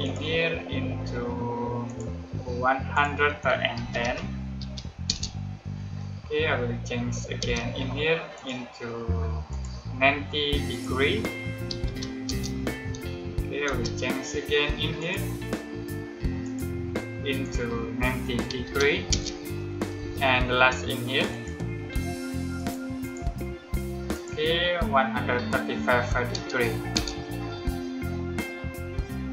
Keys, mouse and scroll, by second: 3.7-4.5 typing, 5.0 Return, 7.3 space, 8.3 click, 11.4-12.2 typing, 13.6 space, 14.9 click, 18.1-19.9 typing, 21.2 click, 26.8 Return.